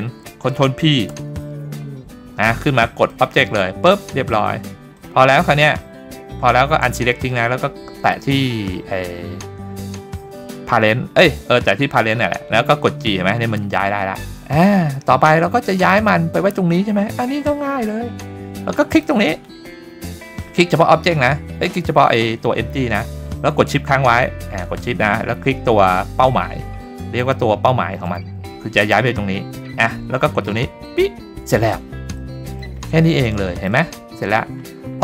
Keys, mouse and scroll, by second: 1.1 ctrl+p, 4.0-5.0 scroll down 2, 5.0 click, 8.0 click, 12.9 g, 17.5-17.9 middle drag, 18.9 click, 27.2 shift+click, 30.8 click, 32.2-32.6 middle drag, 32.8-33.2 scroll up 2, 33.2-33.6 shift+middle drag, 34.0-34.4 scroll down 2.